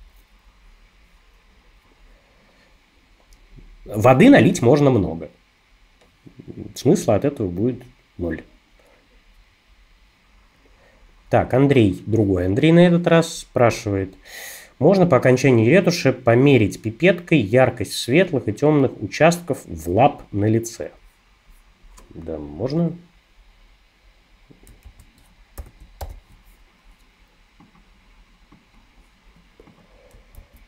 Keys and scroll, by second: 24.8 super+a, 25.6 shift+super+c, 26.0 super+n, 30.4 super+v.